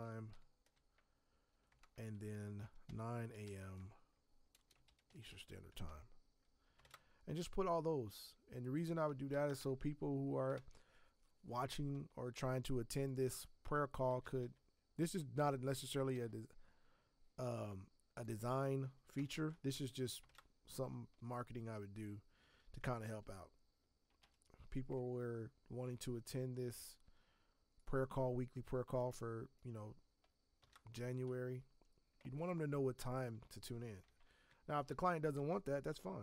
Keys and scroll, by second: 0.0-0.8 typing, 1.7 Return, 2.6-5.7 typing, 6.8 ctrl+Return, 9.4 Tab, 14.0 Tab, 14.4 Tab, 19.1 BackSpace, 19.3 s, 20.2 ctrl+Return, 23.0 ctrl+t, 24.2 Escape, 30.6 ctrl+Return, 34.5 Tab, 35.3 Tab.